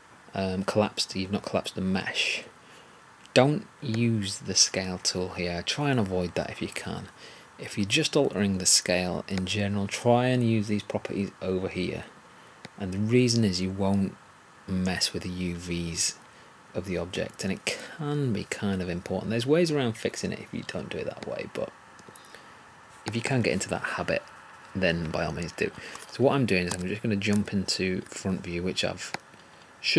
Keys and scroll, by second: 26.6 3.